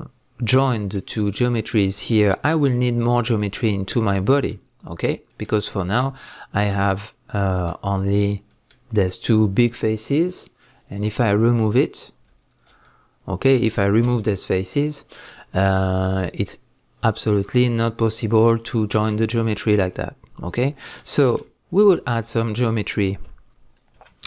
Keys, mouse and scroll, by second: 10.8 click, 12.0 click, 12.5 shift+click, 12.8-24.2 middle drag, 14.0 x, 19.1 scroll down 1, 21.8 ctrl+z, 23.9 KP_1.